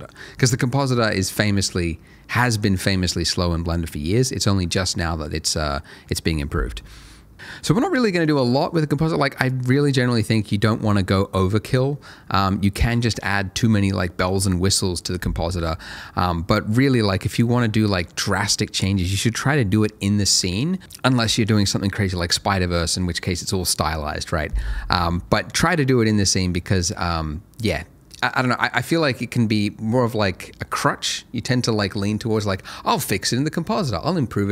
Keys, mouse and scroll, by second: 8.3 middle click, 8.7-9.0 scroll down 1, 9.0 middle click.